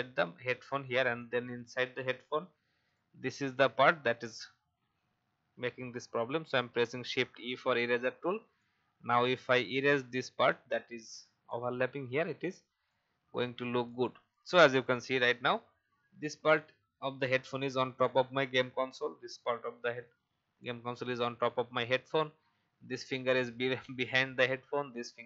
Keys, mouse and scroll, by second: 6.5 shift+e, 8.5-14.4 drag, 14.4 v, 14.7 click, 16.3 alt+scroll down 1.